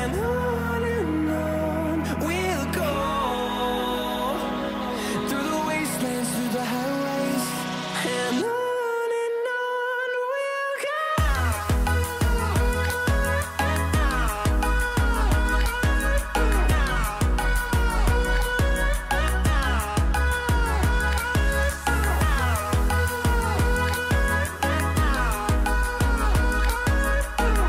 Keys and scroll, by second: 7.2-8.6 typing, 9.8-14.6 typing, 10.9 ctrl+z, 12.3 ctrl+z, 22.0 shift+d, 23.4 a.